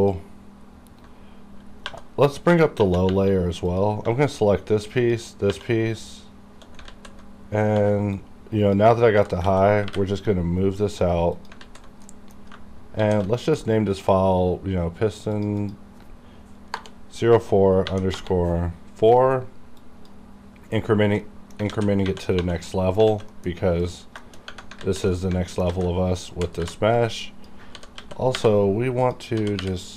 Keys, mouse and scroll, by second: 0.0 click, 0.6-1.4 scroll down 1, 1.8-3.1 typing, 3.7 click, 5.0 shift+click, 5.5 shift+2, 6.9 alt+z, 7.8 b, 8.2 click, 9.1 g, 9.5 x, 11.3 click, 11.3 typing, 11.4 click, 11.6 alt+z, 12.1 middle click, 13.0 shift+s, 15.3 click, 15.7 click, 17.8 4, 18.1 Return, 19.8 click, 19.8 click, 21.2 middle click, 21.7-22.4 typing, 22.7 middle click, 23.0 scroll down 1, 23.1 alt+a, 23.3 middle click, 23.3 middle click, 23.5-23.8 scroll up 1, 23.8 click, 24.2 shift+middle click, 24.4 scroll up 1, 24.8 alt+z, 25.1 alt+middle click, 25.7 alt+a, 26.4 b, 26.6 v, 27.0 click, 27.8 g, 28.0 x, 28.4 y, 29.1 click, 29.4 g.